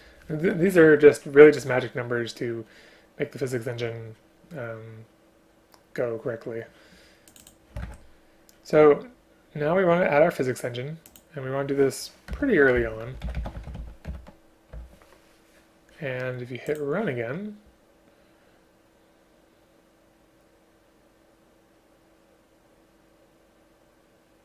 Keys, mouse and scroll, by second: 7.9 ctrl+c, 12.4 Return, 12.9 ctrl+v, 14.1 Return.